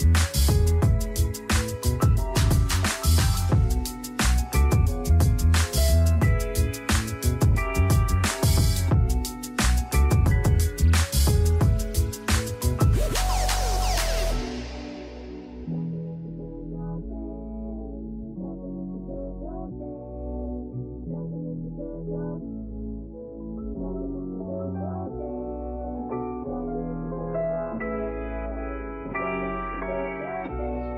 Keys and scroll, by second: 7.2-9.4 typing, 9.5 Return, 24.7 9, 25.1 Return, 26.9 typing.